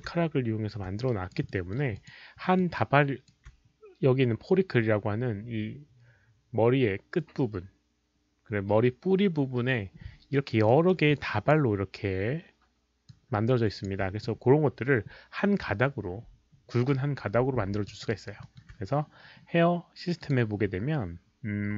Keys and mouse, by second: 1.0 alt+right drag, 1.4 alt+middle drag, 1.9 alt+click, 2.4 alt+middle click, 2.7-3.2 alt+right drag, 3.5 alt+middle click, 3.5 alt+click, 8.9 alt+right click, 8.9 alt+middle click, 8.9 alt+click, 10.3 alt+right click, 10.4 alt+click, 10.6 alt+middle drag, 11.1 alt+click, 13.0-13.8 alt+drag, 15.5 alt+click, 17.7 alt+middle click, 17.8 alt+click, 18.0 alt+right drag, 18.4 alt+middle click, 20.2 click.